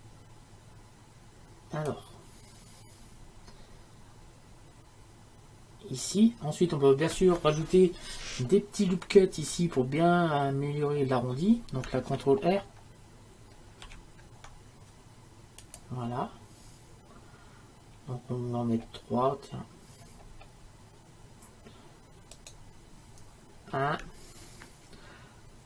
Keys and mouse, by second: 13.9 ctrl+r.